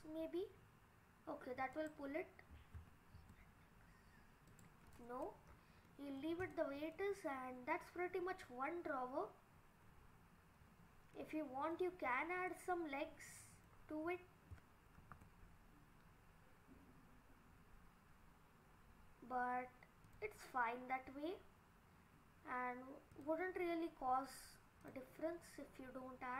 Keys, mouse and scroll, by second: 2.8 e, 5.5 scroll down 4, 5.9 middle click, 6.4 click, 6.8 scroll up 2, 7.0 middle click, 9.9 scroll up 1, 10.4-10.8 scroll down 3, 10.8-11.2 scroll up 4, 11.2 middle click, 12.1-12.5 scroll down 2, 12.5 middle click, 15.0 ctrl+r, 24.8 click.